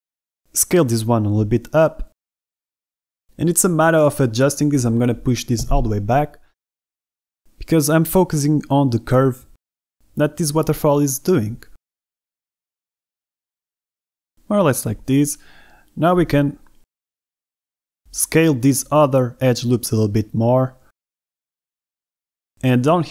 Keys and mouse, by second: 0.0-3.9 typing, 1.8 click, 2.3 click, 3.4 click, 3.6 click, 4.9 ctrl+z, 5.2 g, 5.4 x, 6.0 click, 6.2 a, 6.3 b, 7.5 g, 8.1 x, 9.3 click, 9.6 shift+middle click, 10.9 shift+middle click, 11.7 shift+a, 12.1 b, 12.9 shift+click, 13.2 g, 13.3 x, 14.1 click, 14.5-17.4 typing, 15.8 click, 16.9 middle click, 17.8 middle click, 19.1 alt+shift+click, 19.9 z, 20.2 click, 20.4 s, 20.7 x, 21.2 click, 21.5 s, 21.9 click, 22.2 click, 22.6 alt+shift+a, 22.7 alt+shift+click, 23.0 s.